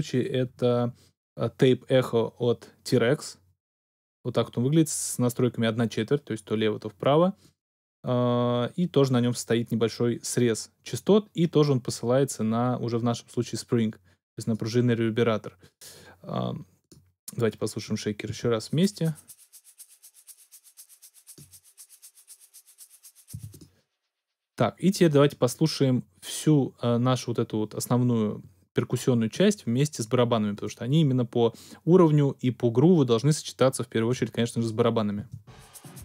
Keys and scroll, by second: 18.2 space, 23.3 space, 34.1 x, 35.3 space.